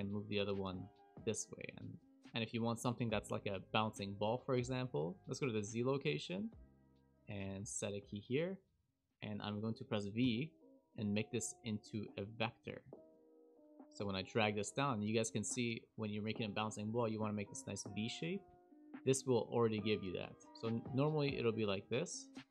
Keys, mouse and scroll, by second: 5.2 click, 5.2-5.7 scroll down 10, 5.2 KP_Decimal, 7.4 i, 8.3 click, 10.1 v, 13.0 click, 13.1 g, 20.5 click, 20.5 v, 20.8 click, 21.6 click.